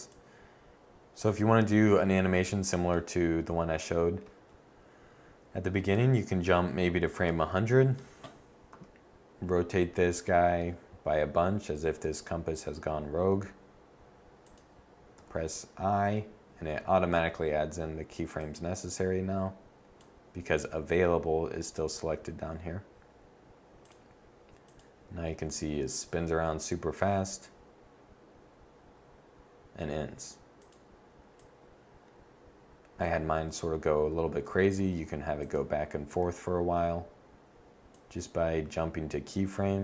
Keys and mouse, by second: 1.7-5.7 drag, 8.4 click, 8.4 r, 14.3 click, 14.9 i, 30.3-32.8 drag, 34.0 r, 35.2 click, 35.8 i, 37.6 drag.